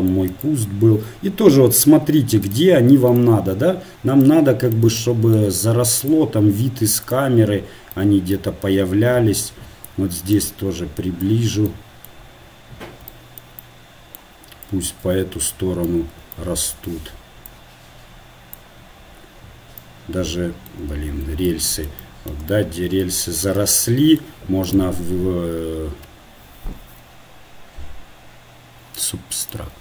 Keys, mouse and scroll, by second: 1.1-2.1 right drag, 6.4-7.4 right drag.